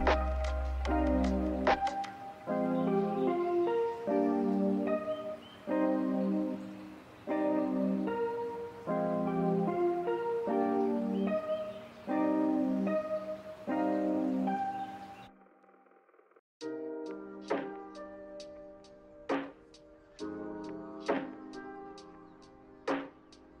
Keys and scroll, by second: 20.9 g.